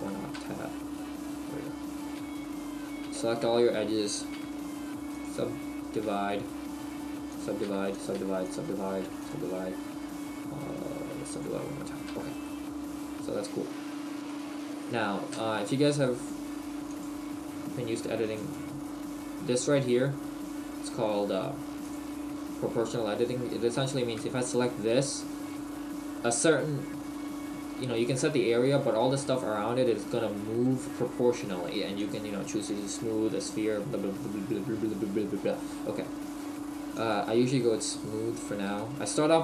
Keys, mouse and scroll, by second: 0.3 Tab, 2.2 w, 4.4 w, 12.1 Tab, 12.4 middle click, 13.9 scroll down 1, 14.3 middle click, 15.4 Tab, 16.9 click, 21.8 click, 24.0 right click, 32.0 click, 38.0 scroll up 1, 38.7 shift+middle click.